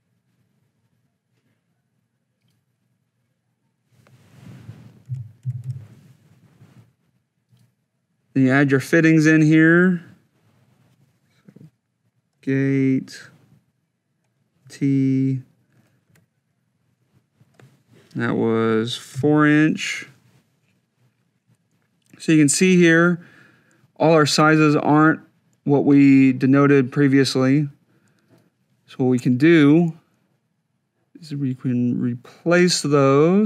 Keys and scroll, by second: 5.2 3, 5.5 5, 12.3 g, 14.5 t, 15.9 Tab, 19.0 4.